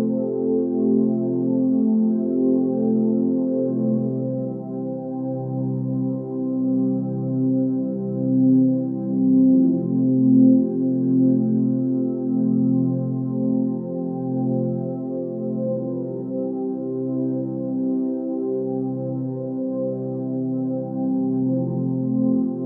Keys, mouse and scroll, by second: 0.5-0.8 scroll down 3, 0.9-3.9 middle drag, 3.9 ctrl+s, 9.5-10.1 middle drag, 10.1 KP_1, 12.2 shift+click, 12.9 r, 17.6-18.5 middle drag, 18.5 KP_1, 19.6 g.